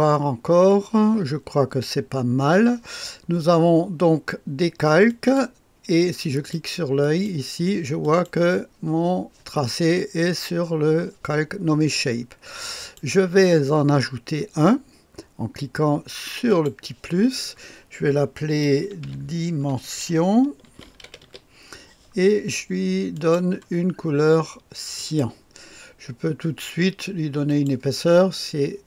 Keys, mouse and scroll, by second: 5.0 click, 6.2 click, 6.9 click, 7.9 click, 12.7 click, 13.4 click, 16.4 click, 18.6-21.6 typing, 23.0-24.2 drag, 24.9 click, 27.4 click.